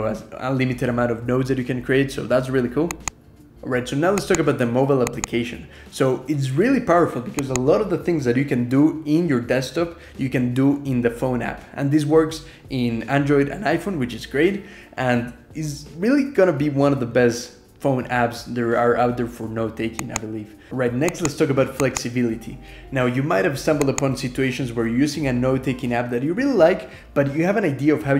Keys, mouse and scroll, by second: 8.8 Escape, 9.0 ctrl+e, 9.2 ctrl+r, 9.8 ctrl+,, 10.1-13.7 typing, 13.4 scroll down 2, 14.1-14.5 scroll up 2, 14.7 scroll down 2, 14.8 click, 16.3 Escape, 16.5 ctrl+r, 17.6 ctrl+e.